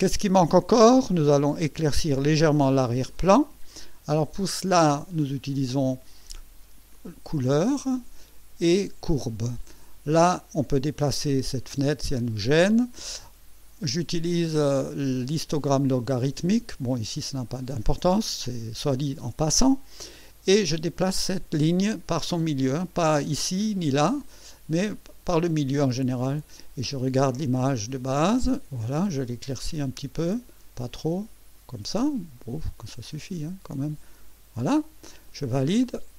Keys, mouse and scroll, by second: 3.1 click, 7.4 click, 9.1 click, 10.8-12.7 drag, 20.1-32.2 drag, 32.8-34.6 drag, 35.3 click.